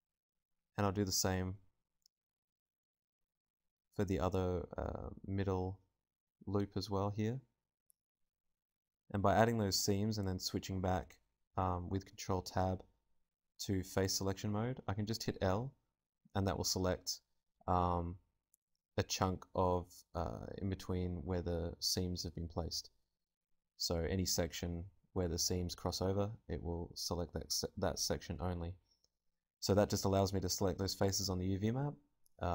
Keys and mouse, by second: 0.2 ctrl+Tab, 1.4-6.2 drag, 1.7 l, 3.5 a, 3.9 ctrl+Tab, 6.5-8.0 right drag, 8.0 ctrl+e, 10.1 KP_Divide, 11.9 ctrl+Tab, 13.2 right click, 13.4 l, 18.1 ctrl+z, 18.1 l, 20.8 alt+z, 22.3 r, 24.5-26.0 drag, 24.5 g, 26.1-28.2 drag, 26.4 Tab, 28.8 KP_0, 30.3-31.9 typing, 31.3 KP_Divide.